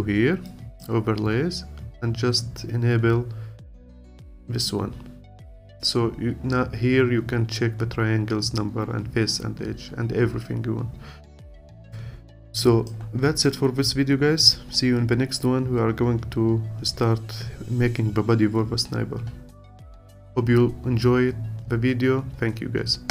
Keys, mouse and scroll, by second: 0.5-3.6 drag, 11.2-11.9 scroll down 2, 11.9-13.3 alt+drag, 13.3-14.3 scroll up 2, 14.3-15.3 scroll up 1, 15.3-18.6 scroll down 4.